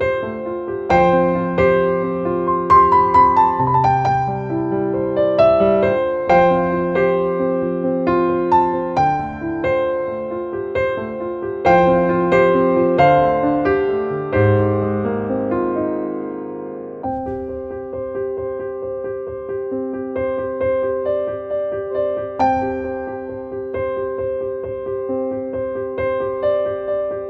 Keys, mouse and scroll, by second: 0.9-3.9 drag, 4.4 Right, 5.2 Down, 6.2-8.0 drag, 9.1 click, 10.5 click, 10.8 shift+n, 11.5 c, 13.9-15.6 typing, 16.5-17.7 drag, 19.7 click, 21.2 click, 23.1 click, 24.3-27.2 drag.